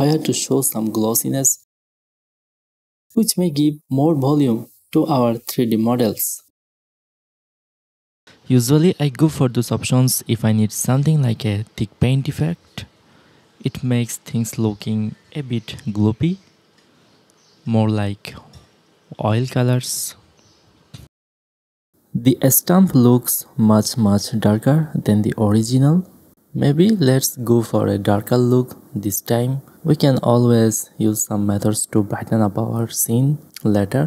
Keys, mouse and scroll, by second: 2.0-4.1 drag, 4.8 middle click, 5.1 click, 6.0 click, 6.9 middle click, 7.5 click, 8.4 click, 9.3 middle click, 10.1-11.2 middle drag, 11.0 click, 12.2 middle click, 12.5 middle click, 13.7 middle click, 14.9 drag, 15.1 middle click, 15.5 middle click, 15.6 click, 15.9 click, 16.1 middle click, 16.5 middle click, 17.3 click, 18.8 middle click, 19.1 a, 19.2 a, 19.4 middle click, 19.8 click, 19.9 x, 20.8 click, 21.6-22.3 middle drag, 21.9 a, 22.1 a, 22.3 shift+space, 22.4 middle click, 22.8-23.5 middle drag, 23.2 alt+a, 23.5 alt+a, 23.8-24.6 middle drag, 24.6 alt+a, 25.8 alt+a, 26.2 shift+space, 26.4 drag, 27.0 ctrl+shift+s, 28.3 middle click, 28.6 click, 28.7-31.3 middle drag.